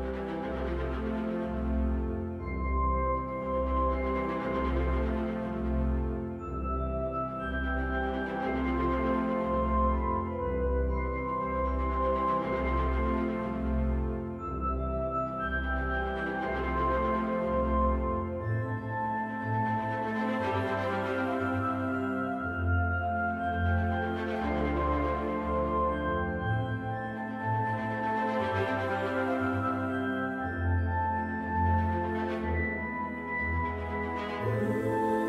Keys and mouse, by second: 0.3-0.8 middle drag, 1.3-2.1 shift+middle drag, 3.0 right click, 5.1 right click, 6.2-7.5 right drag, 7.9-10.8 right drag, 12.2 right click, 13.1-16.2 right drag, 25.2-28.1 right drag, 28.8-32.2 right drag.